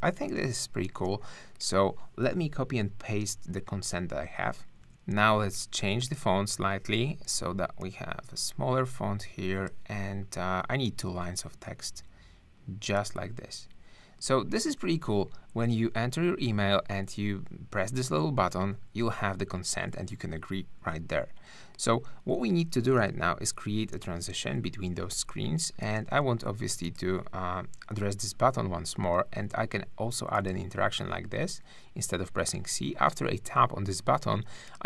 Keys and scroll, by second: 0.1 space, 4.7 super+v, 4.8 super+a, 23.0 super+-, 25.1 super+space.